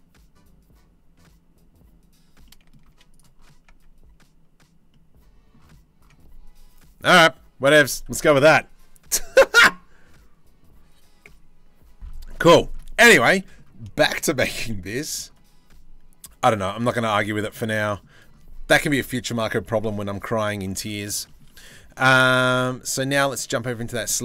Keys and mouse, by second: 2.0 click, 2.4 z, 3.3 Tab, 11.9-14.7 middle drag, 16.9 Tab, 20.4 Tab, 23.0-24.2 drag.